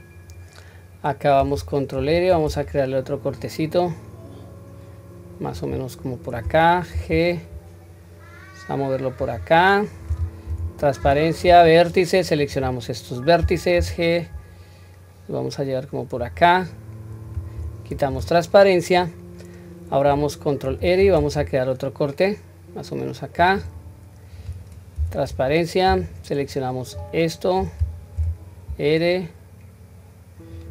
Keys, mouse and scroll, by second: 11.0 1, 11.6 click, 13.8 g, 26.0 shift+click, 28.1 r.